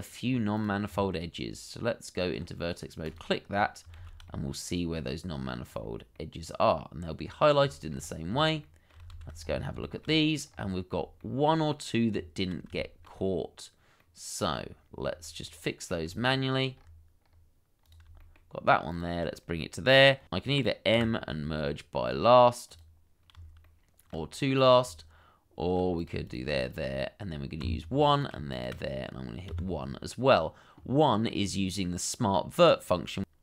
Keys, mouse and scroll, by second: 0.0 scroll down 1, 0.9 Tab, 3.5-3.8 scroll down 1, 4.0 shift+z, 4.2 middle click, 5.6 scroll up 1, 6.1 middle click, 7.2 scroll up 1, 7.7 shift+middle click, 7.9-8.6 shift+scroll up 1, 8.6 shift+middle click, 9.1 shift+z, 9.3-9.8 scroll up 1, 9.8 shift+middle click, 10.0-10.9 shift+scroll up 2, 11.2 shift+middle click, 12.1 Tab, 12.8 shift+middle click, 14.0 middle click, 14.8-15.1 scroll down 1, 15.4 middle click, 16.2 shift+middle click, 16.7 scroll up 1, 18.2 shift+middle click, 19.3 shift+click, 22.0 m, 23.6 shift+middle click, 26.2 shift+click, 27.6 1, 28.5 shift+click, 29.5 1.